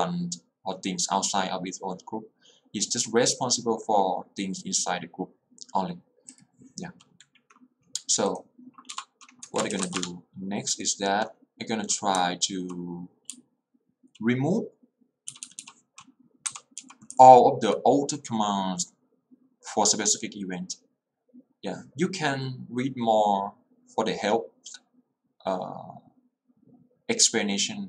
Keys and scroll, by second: 9.0 Return, 9.6 Escape, 10.0 q, 10.1 Return, 12.3 j, 13.4 h, 16.3-17.8 typing.